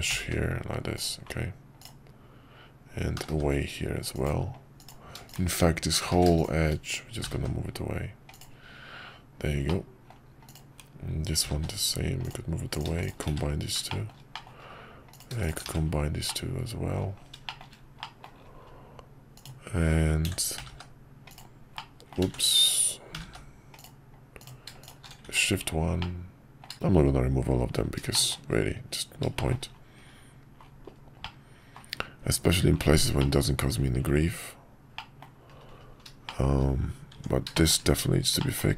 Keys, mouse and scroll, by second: 5.3 shift+click, 6.2 ctrl+z, 7.2 g, 9.8 middle click, 11.4 g, 13.4 1, 13.9 shift+middle click, 14.3 middle click, 15.7 1, 16.3 middle click, 17.5 shift+middle click, 18.0 middle click, 18.3-18.6 scroll down 1, 21.8 middle click, 22.3 ctrl+z, 23.1 g, 25.3 shift+1, 26.0 middle click, 28.1 shift+middle click, 29.3 shift+middle click, 31.2 middle click, 32.2 Tab, 33.2 middle click, 34.9 middle click, 36.2 shift+middle drag, 37.1 Tab, 37.5 shift+middle click, 38.4 shift+middle click.